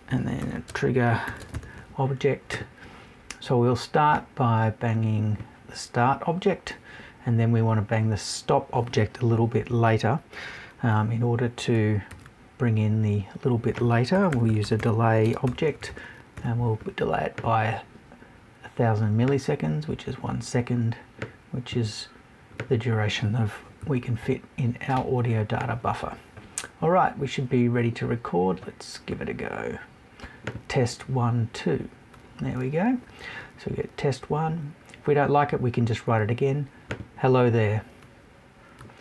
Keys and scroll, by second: 23.8 Left.